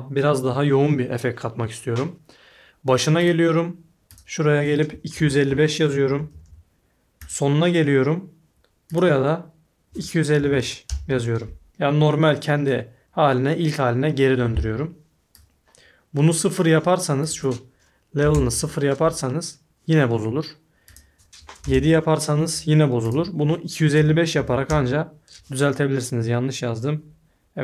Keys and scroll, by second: 5.1-6.8 typing, 9.6-11.0 typing, 18.2 0, 18.3 Return, 21.6 7, 21.7 Return, 23.7-24.9 typing.